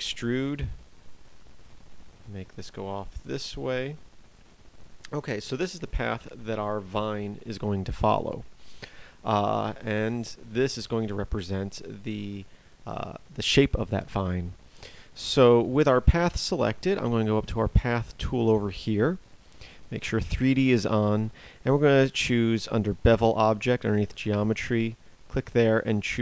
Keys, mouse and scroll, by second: 1.3 e, 5.5 Tab.